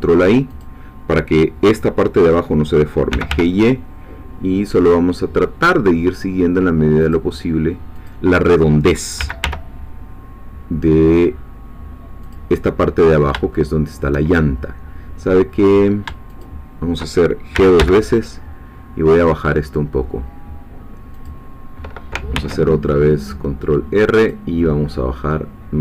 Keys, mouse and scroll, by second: 0.6-3.1 drag, 3.1 g, 3.3 y, 7.0-8.3 drag, 9.2 g, 9.4 y, 12.2 click, 13.5 shift+middle click, 16.3 shift+click, 17.5 g, 21.1 click, 22.3 ctrl+r, 24.2 click.